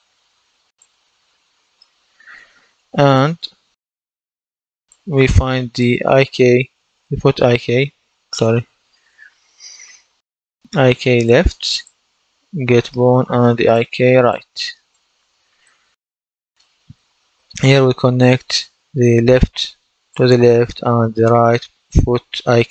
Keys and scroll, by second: 6.0-9.0 typing.